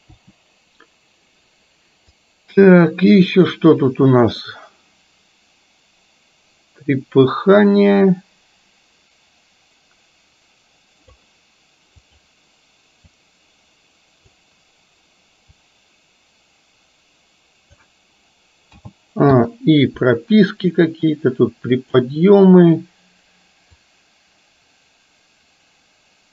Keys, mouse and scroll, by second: 0.2 Delete, 2.2-11.3 drag, 12.1 click, 13.1 click, 13.3-14.3 drag, 15.8-17.8 drag, 18.8 a, 19.5 i, 20.8 click, 24.0-26.3 drag.